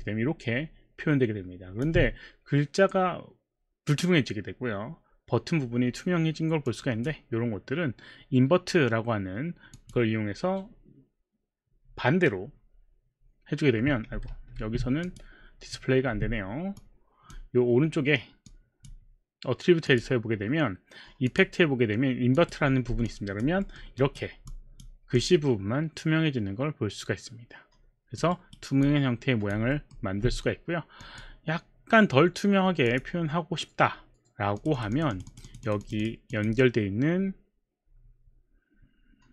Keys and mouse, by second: 6.7 click, 9.8 click, 14.3 ctrl+z, 15.2 click, 16.7 click, 19.9 click, 21.3 click, 22.3 click, 23.6 alt+middle click, 24.8 alt+click, 25.2 alt+click, 28.3 alt+right click, 28.9 alt+click, 29.8 alt+middle click, 31.1 click, 32.9 click, 34.6 click, 34.8 click, 36.2 click, 36.3 click.